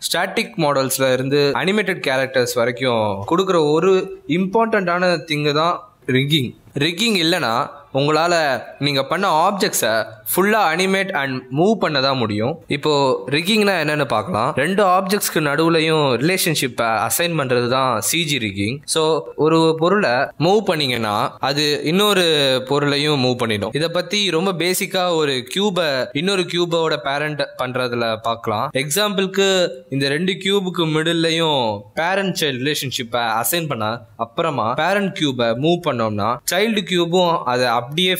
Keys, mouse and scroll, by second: 1.3 scroll down 2, 1.4 g, 4.2 shift+middle click, 4.5 middle click, 5.3 g, 6.8 r, 8.3 s, 8.7 middle click, 8.7 g, 10.0 r, 11.5 s, 12.8 click, 21.9 shift+d, 24.1 click, 24.6 shift+click, 25.6 ctrl+p, 27.3 click, 27.9 r, 29.8 g, 31.2 click, 31.2 r, 32.1 r, 33.2 click, 33.5 g, 34.8 click, 35.1 g, 37.8 x, 38.0 click.